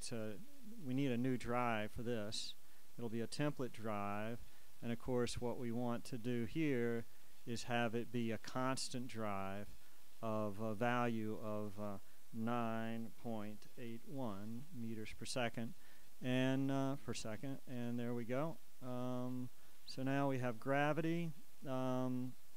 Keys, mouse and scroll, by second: 0.7 click, 1.6 click, 2.9 click, 4.6 click, 5.8 click, 7.0 click, 9.2 click, 11.5 shift+click, 12.8 9, 13.3 ., 13.9 8, 14.2 1, 14.7 Return, 16.3 click, 18.9 click, 20.9 click.